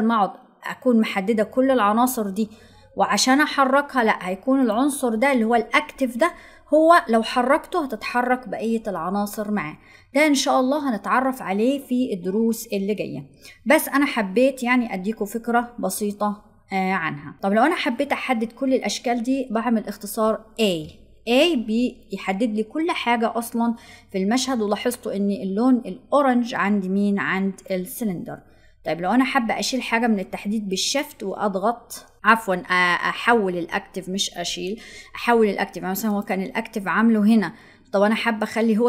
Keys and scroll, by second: 20.5 a.